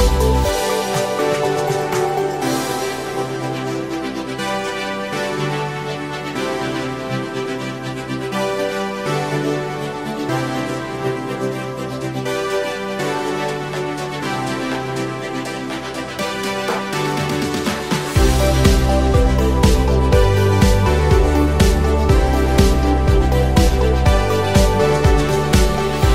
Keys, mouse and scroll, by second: 0.8-2.4 middle drag, 2.6 click, 3.6-5.1 drag, 5.4-7.7 middle drag, 8.8 click, 10.0 click, 11.5 middle click, 12.0 ctrl+z, 12.5 click, 12.9 middle click, 13.7-14.7 drag, 15.0 middle click, 15.9 click, 16.2 middle click, 17.0-18.8 drag, 19.1 middle click, 20.7 3, 21.1 click, 21.6 click, 22.0 shift+click, 22.3 middle click, 23.4 e, 25.3 click, 25.6-26.1 middle drag.